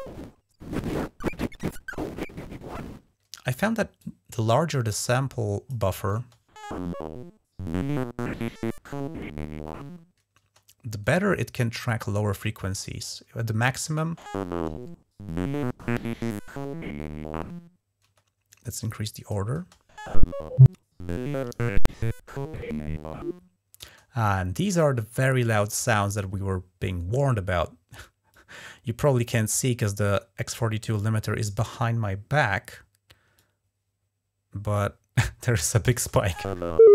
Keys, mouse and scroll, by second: 3.2 space, 3.8-5.8 drag, 6.0 space, 10.3 space, 11.8-13.1 drag, 13.7 space, 17.9 space, 18.3-19.3 drag, 19.4 space, 23.7 space, 28.2-29.4 drag, 29.9 right click, 31.6 click, 33.2-34.6 drag, 35.8 space.